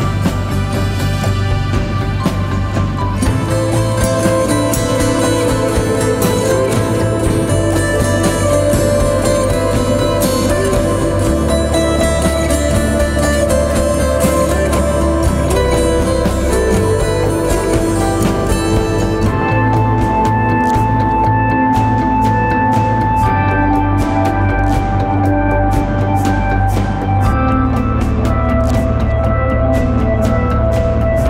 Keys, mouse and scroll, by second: 0.0-1.2 typing, 0.4 click, 0.7 click, 1.0 click, 1.3-4.6 drag, 6.9 shift+click, 8.5-12.6 typing, 8.7 click, 10.0 click, 10.7 click, 12.0 click, 13.1 click, 14.5 z, 14.8 click, 15.0 z, 15.6 click, 19.1 shift+click, 20.6-23.4 typing, 20.8 click, 21.9 click, 22.3 click, 23.2 click, 23.6 click, 27.0 shift+click, 28.3-31.2 shift+drag.